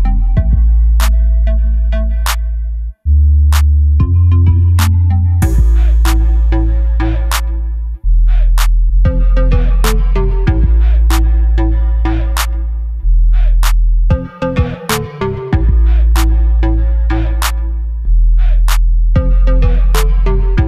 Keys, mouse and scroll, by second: 0.5 scroll down 1, 3.8 click, 4.2 ctrl+r, 10.1 click, 10.6-11.3 scroll up 1, 11.3 3, 11.6 click, 12.0 ctrl+click, 13.0 ctrl+z, 13.7 click, 14.0 ctrl+click, 16.0-16.7 scroll down 1, 16.7 e, 18.6 click, 19.0-20.6 middle drag.